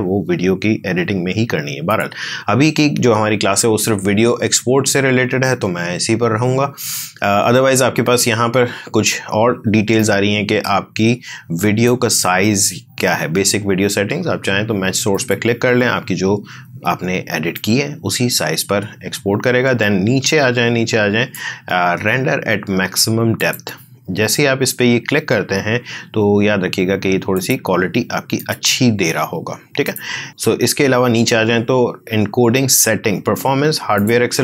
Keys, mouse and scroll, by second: 1.8 click, 9.9-14.1 drag, 15.1 click, 17.5-23.3 drag, 27.3 click, 29.3 click, 30.3-31.8 scroll up 1, 33.6 scroll down 1, 33.9 click.